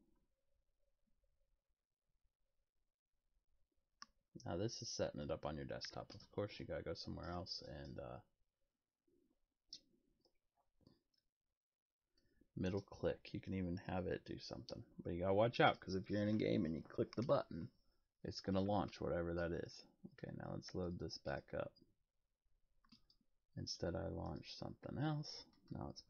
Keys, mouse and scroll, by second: 20.9 click, 21.3 click, 22.9 click, 24.2 click.